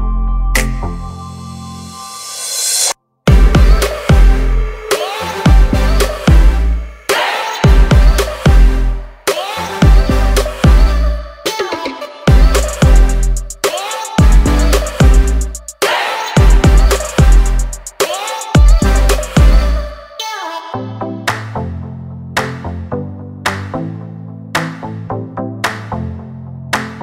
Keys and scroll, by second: 2.9 m, 4.5 1, 4.8 0, 4.9 Return, 6.2 2, 6.4 Return, 6.7 space, 7.2 p, 8.5 2, 8.8 Return, 9.1 space, 9.3 Escape, 10.6 l, 15.5 space, 16.3 m, 16.9 Up, 17.5-21.2 typing, 17.7 Return, 19.4 Return, 26.7 r.